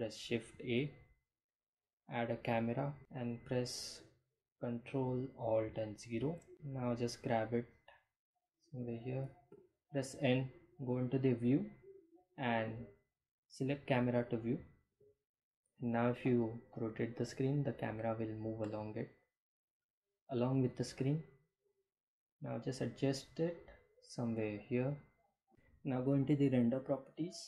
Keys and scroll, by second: 4.0 ctrl+alt+0, 5.8 g, 9.6 n, 15.6 n, 21.0 g, 21.8 x.